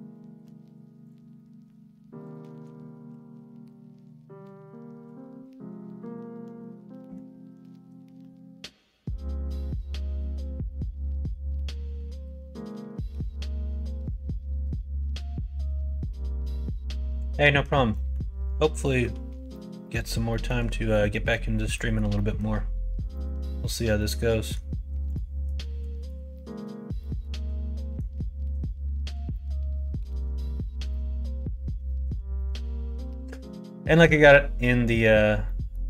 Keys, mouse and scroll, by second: 0.4 f, 1.0 click, 1.3 middle click, 2.2 shift+click, 3.1 f, 3.6 middle click, 5.0 middle click, 5.8 middle click, 6.3 shift+middle click, 6.9 middle click, 8.1 middle click, 9.2 shift+middle click, 9.7 middle click, 11.7 middle click, 12.4 shift+middle click, 13.5 middle click, 14.0 middle click, 14.3 shift+middle click, 14.8 middle click, 15.2 middle click, 15.9 middle click, 16.8 middle click, 17.4 middle click, 17.9 middle click, 18.8 middle click, 19.5 middle click, 20.2 middle click, 20.8 middle click, 21.7 middle click, 22.1 middle click, 23.1 middle click, 23.9 middle click, 25.7 2, 26.0 click, 26.3 middle click, 26.9 middle click, 27.7 middle click, 29.3 middle click, 30.8 middle click, 31.8 middle click, 32.3 shift+middle click, 34.0 middle click, 34.5 middle click, 35.4 middle click.